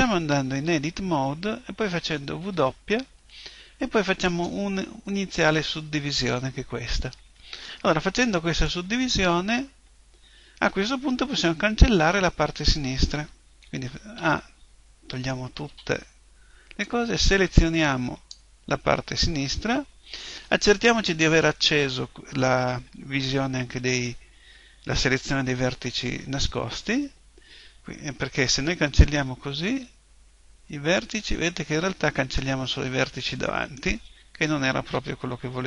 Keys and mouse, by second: 0.5 Tab, 2.4 w, 14.2 a, 15.6 b, 21.1 click, 29.6 Delete, 32.6-34.7 middle drag, 34.7 KP_1.